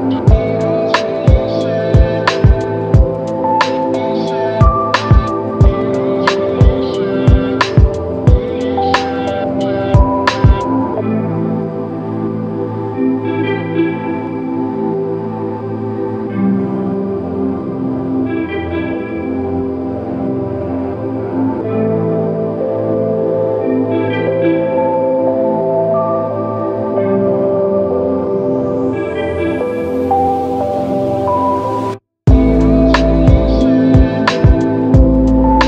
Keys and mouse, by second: 2.5 shift+click, 6.4 alt+click, 8.0 double click, 14.5 f, 15.4 double click, 16.5 shift+click, 19.9 f, 27.4 alt+click, 29.5 shift+click, 31.1 alt+shift+click, 35.0 alt+click.